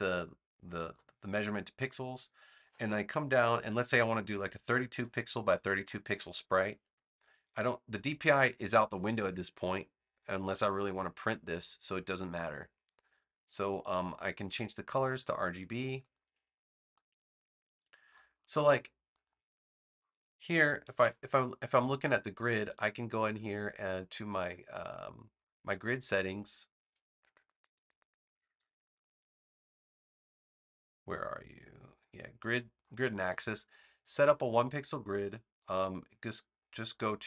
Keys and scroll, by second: 4.6-6.2 typing, 20.9 super+'.